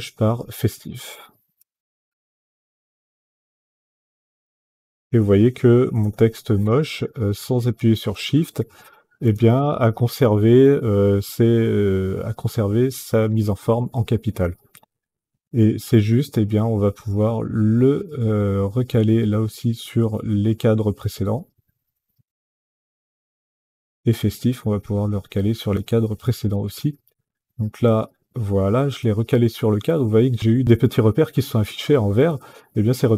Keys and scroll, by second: 1.3-2.8 typing, 4.2 e, 4.5 s, 5.6 t, 5.9 i, 7.8 f, 9.0 space.